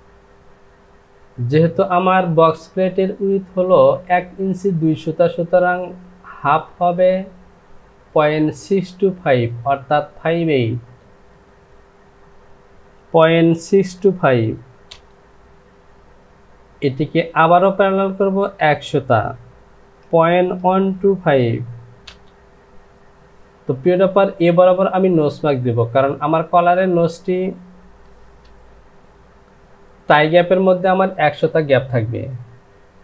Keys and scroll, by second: 11.7 Down, 13.5 KP_6, 14.1 KP_2, 14.9 Return, 20.0 KP_Decimal, 20.6 KP_1, 21.3 KP_2, 22.0 Return, 28.5 Return.